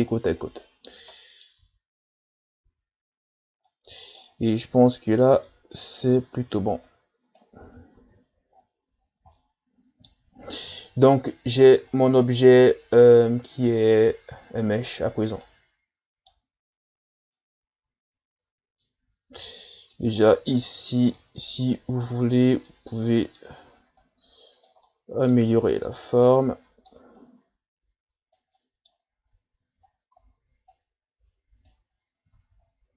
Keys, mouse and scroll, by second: 0.0-1.1 scroll down 16, 1.1 middle click, 1.6 Tab, 2.0-2.7 scroll up 5, 2.7 a, 3.6 middle click, 4.2-5.0 scroll up 9, 5.0 middle click, 5.5 Tab, 6.1-6.9 scroll down 2, 6.9 right click, 7.7 ctrl+z, 8.0 Tab, 8.5-9.4 scroll down 10, 9.4-10.8 middle drag, 10.8-11.5 scroll up 4, 11.5 right click, 11.9-12.8 scroll down 5, 12.8 scroll up 2, 14.9 Tab, 15.4-16.4 scroll up 1, 16.4-16.9 scroll up 1, 17.4-20.2 middle drag, 20.2-21.0 ctrl+scroll up 13, 21.1 middle click, 21.8-22.2 scroll up 2, 22.7-24.0 middle drag, 24.0 right click, 24.9 middle click, 25.8-27.2 drag, 27.2 right click, 28.5-29.8 middle drag, 29.8 shift+scroll up 1, 30.7 right click, 32.0-32.4 scroll down 1, 32.4 Tab, 32.6-32.9 scroll down 4.